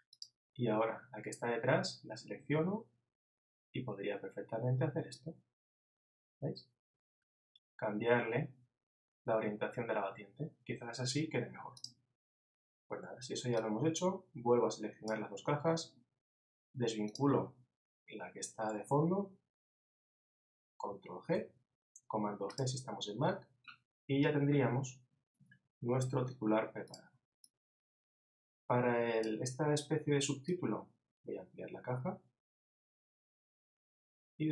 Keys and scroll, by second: 1.8 super+Down.